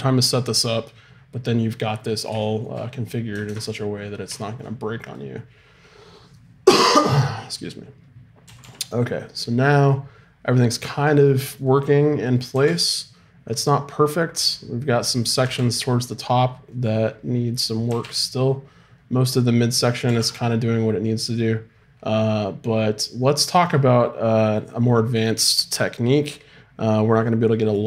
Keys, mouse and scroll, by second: 2.2-3.4 middle drag, 3.4 ctrl+Tab, 3.8-5.0 middle drag, 5.0-6.6 drag, 6.6 right click, 8.4 r, 12.2 right click, 12.5 r, 15.4 r, 17.8 r, 20.0 right click.